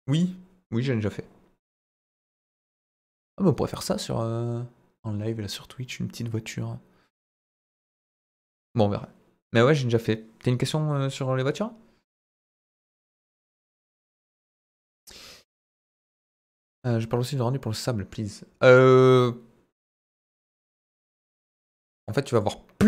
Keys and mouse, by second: 22.4-22.8 drag.